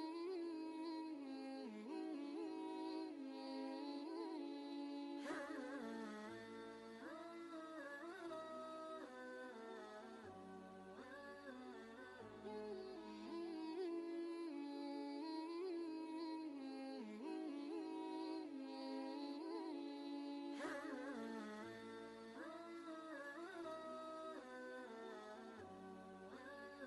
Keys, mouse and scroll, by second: 5.7 click, 5.9 ctrl+space, 6.1 ctrl+click, 6.5 ctrl+space, 7.9-10.7 drag, 9.3 typing, 10.7 ctrl+g, 12.0 click, 13.1 ctrl+space, 13.2 ctrl+click, 13.6 ctrl+space, 14.2-17.9 drag, 17.9 click, 18.1 ctrl+space, 18.3 ctrl+click, 18.7 ctrl+space, 22.0 ctrl+z, 23.2 click, 23.6 ctrl+space, 23.7 ctrl+click, 24.1 ctrl+space, 25.5 click, 26.7 shift+Right.